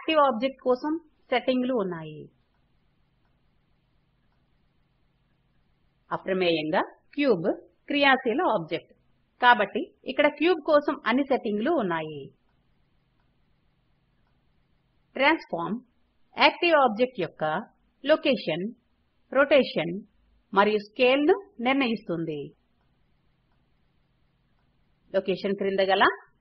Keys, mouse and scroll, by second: 23.0 click.